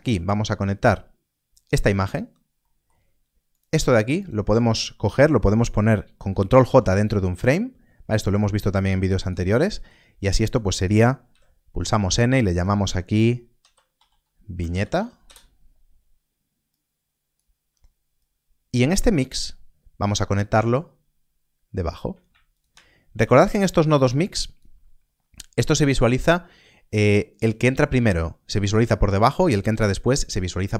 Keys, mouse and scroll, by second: 0.1 click, 3.1 middle click, 3.5 click, 4.1 shift+click, 7.4 ctrl+j, 7.4 click, 9.5 middle click, 10.3 click, 11.3 n, 12.5 click, 13.9 i, 16.7 click, 22.5 ctrl+shift+click, 24.1 click, 25.0 scroll up 1, 25.8 middle click.